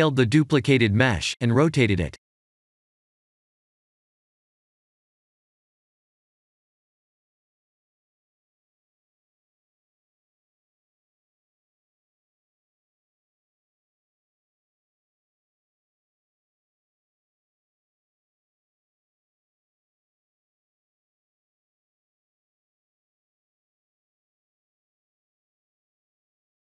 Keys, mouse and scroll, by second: 1.1-1.6 scroll down 2, 1.6 middle click, 3.1 shift+d, 5.0 KP_3, 5.6 r, 6.6 scroll down 1, 6.6 middle click, 8.6 s, 9.8 middle click, 10.5 s, 12.6 middle click, 13.4 KP_3, 14.1 shift+d, 14.3 middle click, 16.9 s, 17.9 r, 18.7 middle click, 19.6 click, 20.1 scroll up 3, 20.5 middle click, 25.3-25.9 scroll down 3.